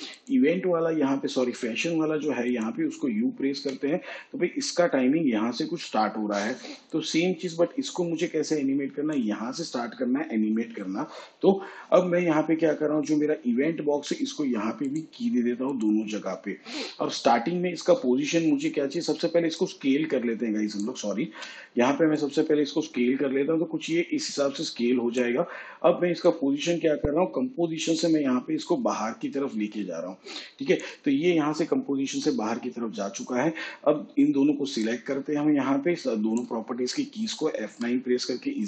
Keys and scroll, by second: 3.5 u, 21.2 ctrl+z, 37.6 F9.